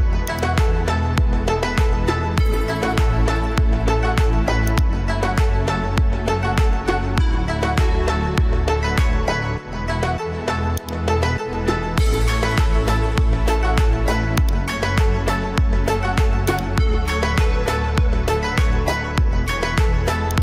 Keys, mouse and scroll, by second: 4.7-8.7 drag, 10.8-12.4 ctrl+drag, 14.4 ctrl+click, 15.2 ctrl+click, 16.5 click, 17.6-18.9 alt+scroll down 3, 19.2 alt+scroll up 1, 20.3-20.4 alt+drag.